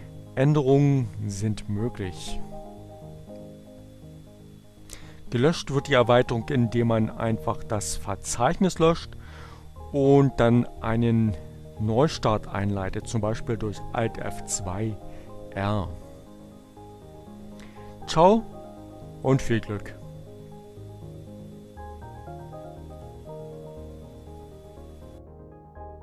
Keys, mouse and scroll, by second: 5.8 click, 21.4 click.